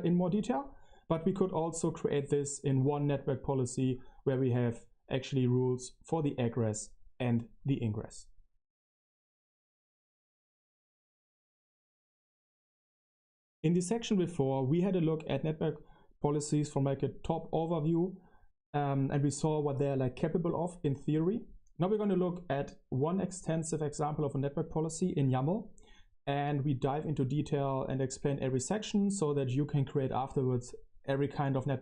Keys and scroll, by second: 24.0 super+=, 25.4 super+-, 25.9 super+-, 26.7 super+-, 28.0 super+=.